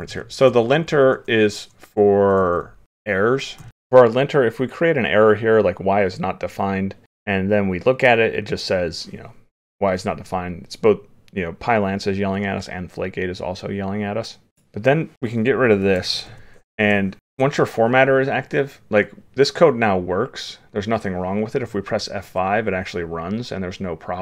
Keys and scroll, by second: 17.2 ctrl+s.